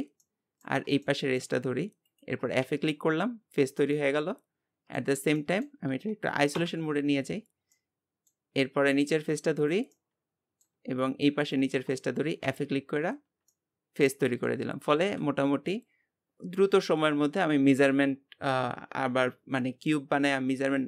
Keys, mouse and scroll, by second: 0.2 middle click, 0.9 scroll down 1, 1.0-2.1 shift+middle drag, 2.1 shift+click, 2.6 f, 3.4 scroll down 3, 3.8-5.9 middle drag, 5.9 Tab, 6.5 KP_Divide, 7.3-7.7 scroll up 1, 7.8 middle click, 8.6 Tab, 8.8 scroll up 2, 9.6 click, 9.9-11.4 middle drag, 11.4-12.4 shift+drag, 12.4 f, 12.8 scroll down 2, 13.1 Tab, 13.5-15.1 middle drag, 15.1 KP_Divide.